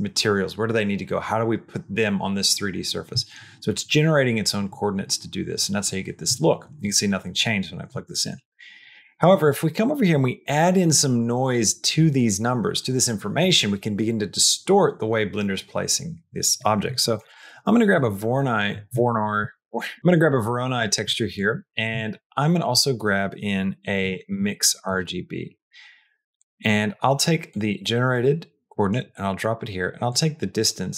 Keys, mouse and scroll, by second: 8.0 middle click, 8.7 click, 9.3 shift+a, 19.2 click, 19.5 shift+middle click, 21.3 click, 21.6 click, 22.0 shift+a, 27.4-28.8 drag, 30.0-30.9 drag.